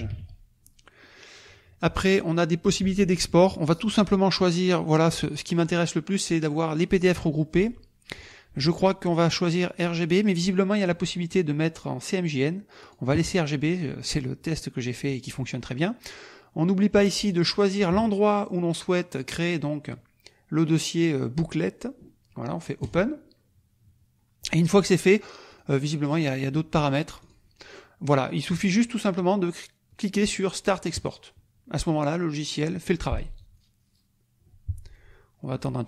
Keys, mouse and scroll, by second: 0.0-0.6 typing, 4.0 click, 5.5 click, 8.2 click, 12.9-15.4 drag, 17.2 click, 22.8 click, 25.5 click, 27.2 click, 30.9 click.